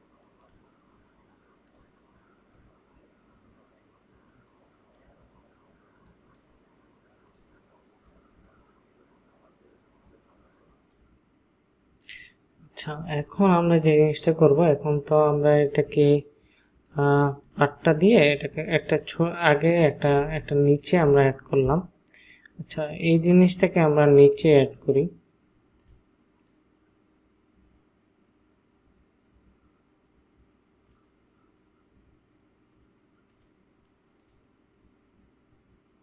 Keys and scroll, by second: 20.2 ctrl+space.